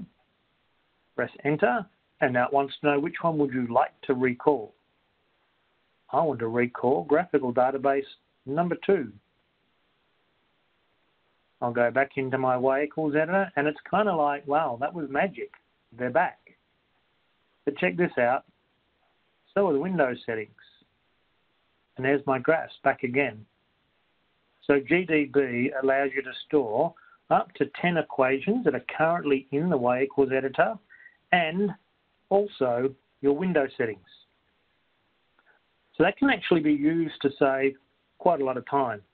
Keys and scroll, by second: 1.9 Return, 6.3 3, 9.2 2, 10.2 Return.